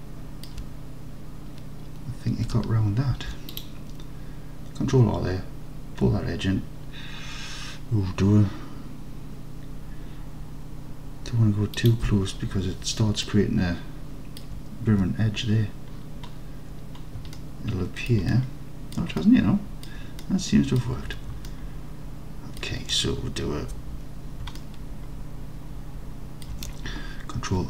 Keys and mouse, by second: 0.0 alt+middle click, 3.2 ctrl+r, 11.8-13.2 middle drag, 13.5-14.4 alt+drag, 15.0 Tab, 17.4-18.1 alt+drag, 18.4-19.0 drag, 19.2-19.9 alt+drag, 20.3-20.8 drag, 21.2 Tab, 21.5-22.6 alt+drag, 24.6-26.5 alt+drag.